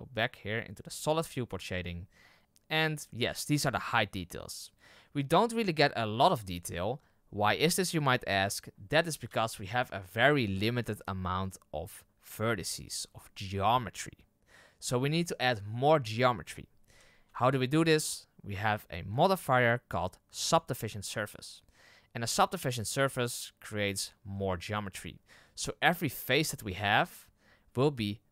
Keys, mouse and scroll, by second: 4.2-4.9 scroll down 1, 4.9-5.4 scroll up 1, 5.4-8.1 scroll down 1, 9.5 z, 17.2 z, 20.5-24.0 drag, 26.0 z.